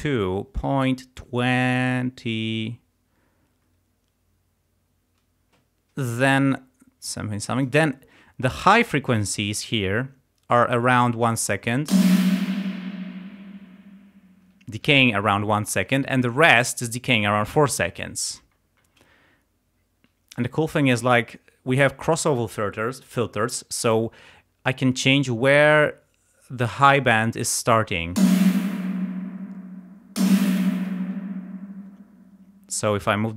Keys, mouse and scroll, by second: 11.9 space, 13.9 space, 25.0-27.2 drag, 28.2 space, 30.8 space, 32.9-33.3 drag.